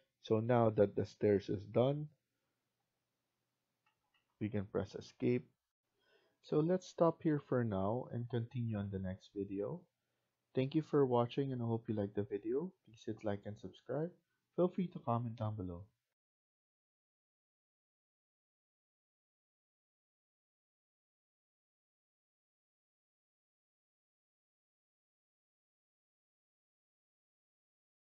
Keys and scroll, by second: 3.7 Escape, 4.0 Escape.